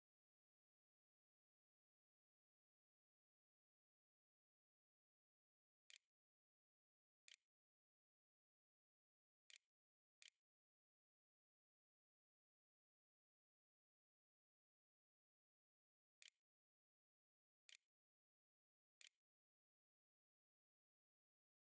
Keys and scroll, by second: 0.9 a, 4.8-9.8 typing, 9.8 Return, 10.9-12.0 typing, 13.1-14.5 typing, 15.9-19.9 typing.